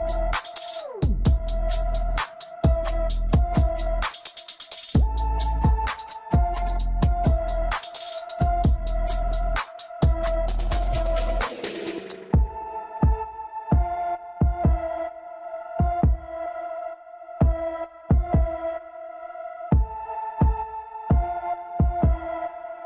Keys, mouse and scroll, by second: 1.0 KP_1, 3.2-4.7 scroll down 11, 4.7 shift+z, 5.8 ctrl+click, 7.8-8.1 scroll up 1, 10.3 scroll up 3, 10.4 ctrl+click, 13.8-14.2 scroll down 1, 14.2-15.8 middle drag, 15.8-16.2 scroll up 2, 17.1-17.6 scroll up 7, 17.6-20.7 middle drag, 20.7 scroll down 3, 21.8 shift+z, 22.5-22.8 middle drag.